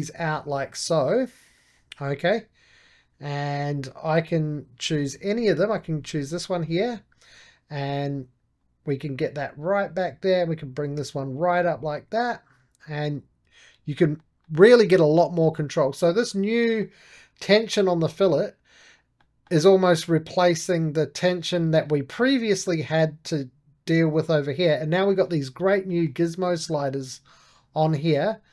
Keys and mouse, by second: 5.6-8.1 drag, 8.5-14.3 drag, 14.3-23.9 middle drag, 25.0-27.0 middle drag, 27.0-28.5 drag.